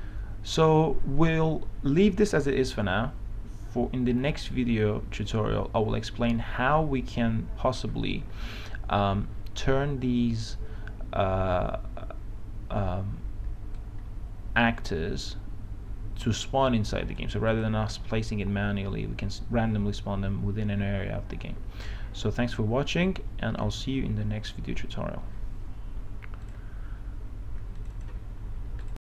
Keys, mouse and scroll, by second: 14.0-17.8 drag.